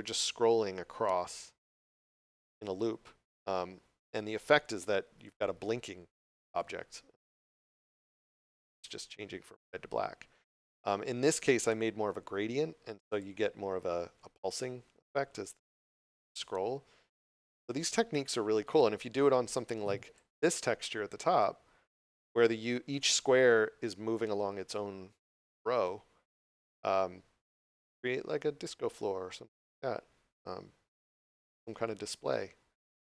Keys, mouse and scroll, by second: 6.5 click, 11.6 d, 12.1 d, 18.2 click, 19.1 d, 21.7 d, 22.3 w, 22.3 d, 27.6 click.